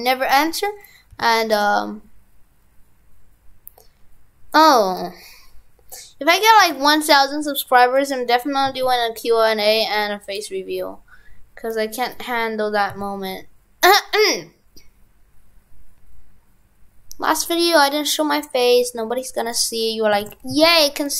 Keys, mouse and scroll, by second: 20.2 shift+f.